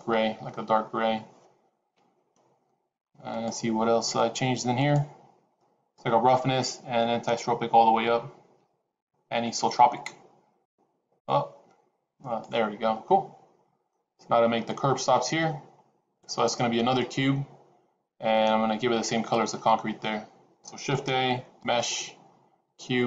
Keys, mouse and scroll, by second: 10.6 click, 11.6 click, 13.0 middle click, 20.8 shift+a.